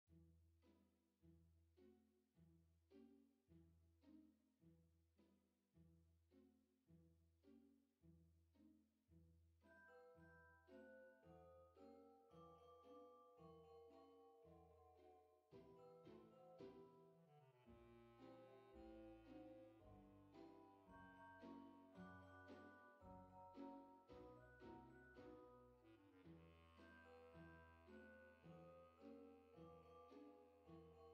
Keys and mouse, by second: 0.1 click, 5.3 F6, 7.2 click, 10.0 click, 11.1 click, 12.5 click, 13.2 KP_0, 13.4 KP_Decimal, 13.8 KP_4, 16.8 click, 17.9 click, 19.4 F6, 20.3 click, 24.8 click, 25.2 KP_0, 25.3 KP_Decimal, 25.6 KP_6, 26.2 click, 26.6 KP_0, 26.9 KP_Decimal, 27.1 KP_2, 28.3 click, 30.2 click.